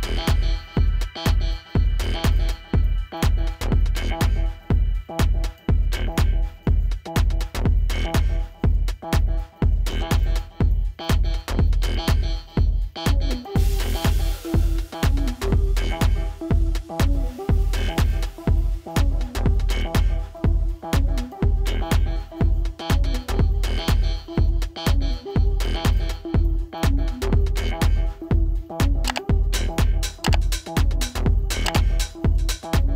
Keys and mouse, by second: 2.2 -, 2.7 ctrl+t, 3.5 right click, 4.5 click, 5.6 Return, 6.3 ctrl+=, 8.5 click, 10.1 typing, 11.7 alt+shift+e, 13.5 right click, 15.1 click, 20.5 click, 22.9 click.